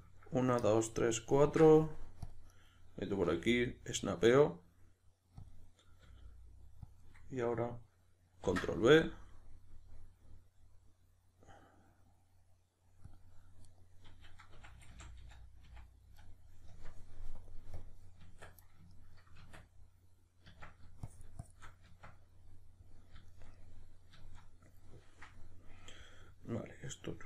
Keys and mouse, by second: 2.7 right click, 3.2 g, 5.5 click, 6.1 r, 7.1 click, 8.5 ctrl+b, 13.1 click, 13.7 right click, 14.6 f, 17.4-18.2 drag, 18.2 Tab, 18.9-21.1 ctrl+middle drag, 19.4 Tab, 21.1-22.6 shift+drag, 21.9 Tab, 22.6-27.2 middle drag.